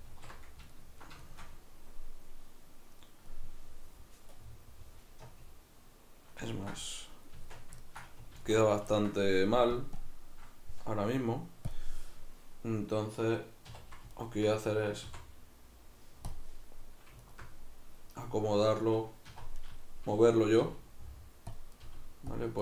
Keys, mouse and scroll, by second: 0.1 alt+q, 7.4 Tab, 8.4 alt+q, 9.8 click, 13.7 click, 13.7 2, 14.1 alt+right click, 15.0 x, 17.2 alt+right click, 19.3 1, 19.6 right click, 20.7 g, 21.6 click, 21.7 right click, 21.9 g, 22.4 click.